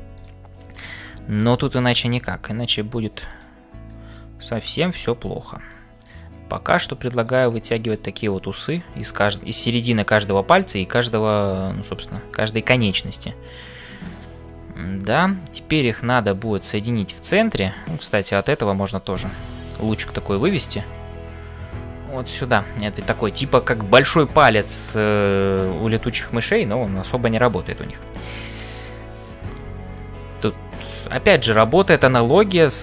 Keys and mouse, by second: 0.0-32.8 typing, 0.7 middle click, 1.7 click, 3.8 middle click, 4.7 click, 7.2 click, 28.6 click, 30.8 click, 32.5 click.